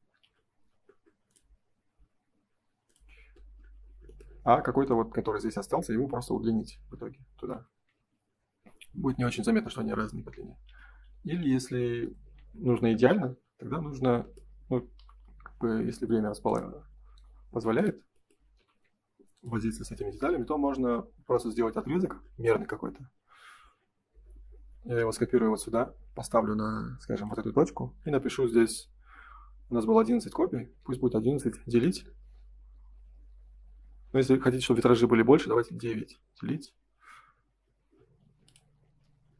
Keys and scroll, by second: 3.3 space, 7.9 ctrl+s, 10.3 ctrl+z, 17.3 space, 18.5 m, 31.6 Return, 35.9 Return.